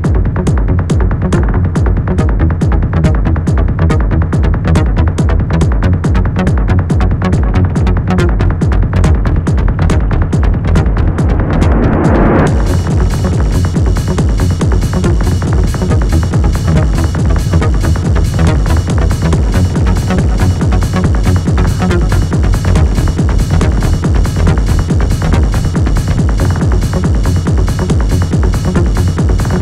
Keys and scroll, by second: 7.1 shift+k, 7.6 Return, 10.3 Escape, 13.0 shift+l, 13.2 shift+e, 13.4 Return, 15.3 p, 16.5 shift+f, 16.6 shift+o, 16.9 shift+t, 18.0 p, 20.3 p, 21.6 p, 24.9 F1, 25.3 F2, 27.4 shift+l, 27.7 shift+g, 27.8 Return.